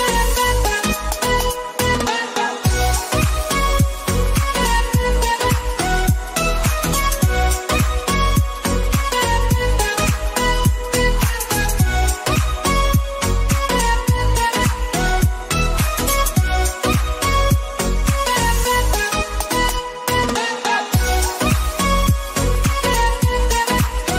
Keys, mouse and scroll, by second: 0.5 click, 5.4 click, 8.5 click, 13.3 click, 14.9 click, 15.1 ctrl+t, 15.8-17.9 shift+drag, 17.9 Down, 18.8 Return, 20.1 ctrl+s, 22.7 click.